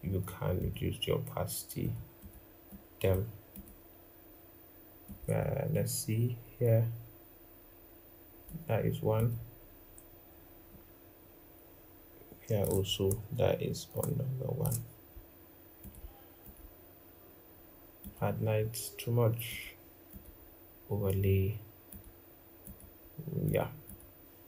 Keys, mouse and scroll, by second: 1.9 double click, 2.4 double click, 10.4 alt+click, 13.6 shift+click, 23.6 double click.